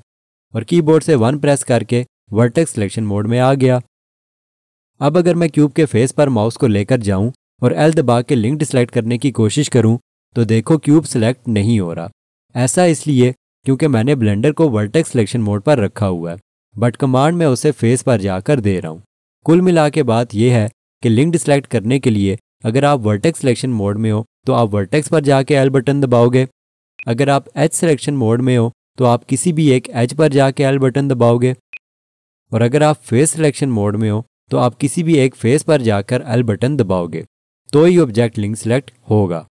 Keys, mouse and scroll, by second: 1.9 1, 8.2 l, 25.8 l, 27.0 click, 27.8 2, 30.1 l, 31.7 click, 33.1 3, 36.3 l.